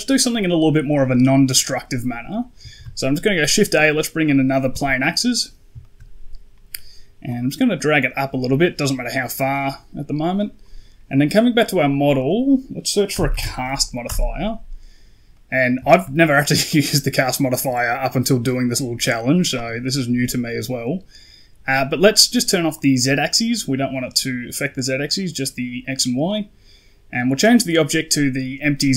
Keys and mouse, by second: 0.5 middle click, 2.6 shift+a, 5.1 middle click, 5.7 shift+middle click, 7.2-7.9 drag, 9.4 right click, 11.7-13.9 drag, 15.2 middle click, 15.7 shift+middle click, 22.6 click, 27.1-28.9 drag.